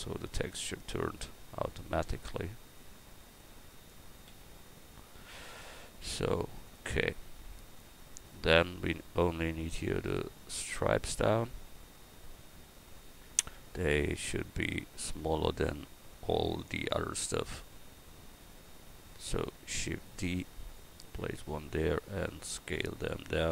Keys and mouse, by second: 4.3 a, 14.2-20.1 drag, 20.1 shift+d, 20.8-21.8 drag, 22.2 s.